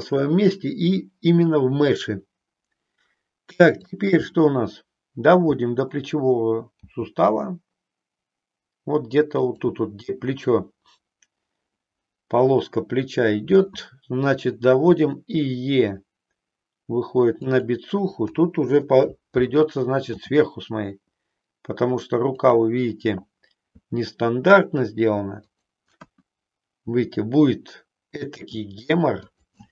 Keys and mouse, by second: 3.8 click, 6.8 g, 9.4 click, 14.9 e, 17.5 click, 18.2 KP_7, 20.1 g, 23.8 e, 26.0 KP_1, 28.4 e, 29.2 click.